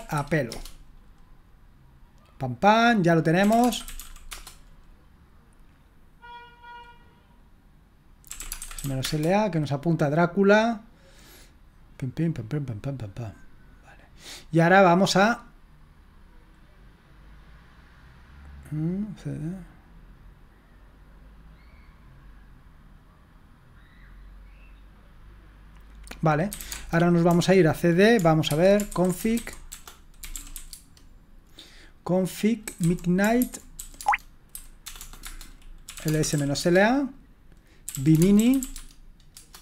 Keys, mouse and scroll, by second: 0.5 Return, 3.1-4.4 typing, 8.1-9.3 typing, 26.3-27.1 typing, 28.2-31.0 typing, 32.4-39.1 typing, 39.3 Return.